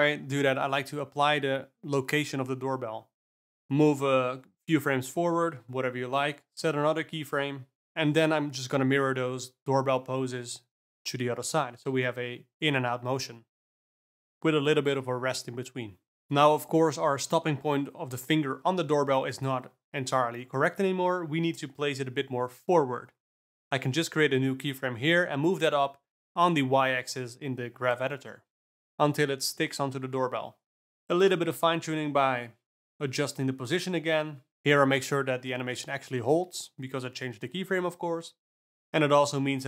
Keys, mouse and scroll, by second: 0.0 ctrl+z, 0.2 ctrl+a, 4.1 Right, 4.4 Right, 4.7 Right, 5.0 Right, 5.5 g, 7.8 alt+a, 8.1 click, 8.3 shift+d, 9.6 click, 9.8 shift+d, 11.0 KP_0, 12.3 Down, 13.4 shift+Left, 13.6 d, 13.8 space, 16.8 space, 17.5-19.0 drag, 19.0 middle click, 22.0 alt+a, 22.2 click, 22.6-23.5 scroll up 1, 23.5 g, 30.2 alt+middle click, 30.3 g, 35.7 alt+a, 35.9 click, 36.2 shift+d, 38.6 KP_0, 39.2 click.